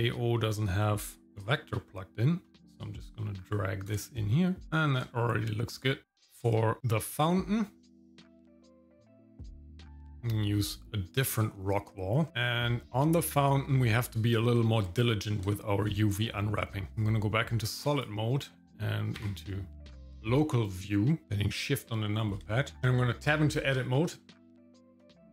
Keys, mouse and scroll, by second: 1.4-3.9 drag, 4.6 middle click, 4.6 scroll up 3, 5.1 shift+middle click, 9.9 click, 13.4 shift+middle click, 13.9 middle click, 14.4 shift+middle click, 15.5 shift+middle click, 16.1 scroll up 1, 17.0 click, 18.0-19.1 drag, 20.7 shift+middle click, 21.2 scroll up 1, 22.5 shift+middle click, 22.8 scroll down 1, 23.3 Tab, 24.4 shift+middle click, 24.8 click.